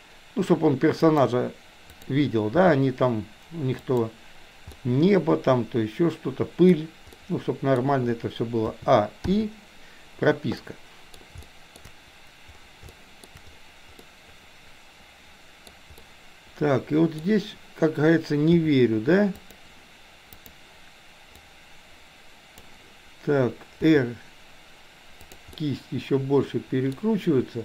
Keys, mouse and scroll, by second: 2.0 click, 2.5 g, 4.7-5.0 scroll up 1, 5.0-6.8 middle drag, 7.2-7.8 scroll up 1, 8.8 a, 9.3 i, 10.7-11.3 middle drag, 11.4-11.8 shift+middle drag, 12.9-13.3 shift+middle drag, 14.0-15.7 middle drag, 15.9-17.3 middle drag, 18.7 r, 20.4 click, 21.4-22.7 drag, 23.9 r, 25.7-27.0 middle drag.